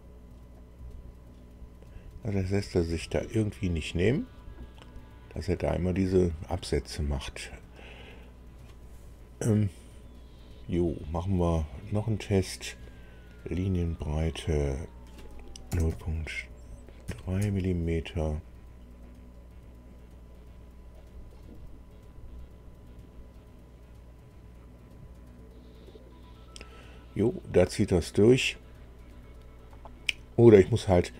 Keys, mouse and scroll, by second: 0.5-7.9 drag, 14.5 click, 15.6 KP_0, 15.8 KP_Decimal, 17.0 KP_3, 17.4 Tab, 20.9 click.